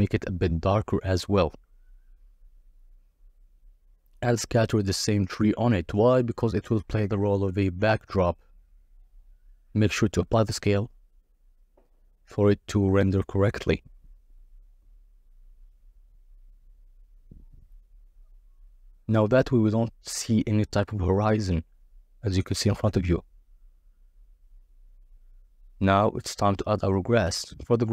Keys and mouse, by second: 3.5 click, 4.3 click, 7.8 click, 7.9 ctrl+a, 10.1-12.6 middle drag, 12.6-15.3 drag, 16.0 KP_0, 19.3 z, 20.1 click, 21.6 click, 26.3 drag, 27.2 shift+click.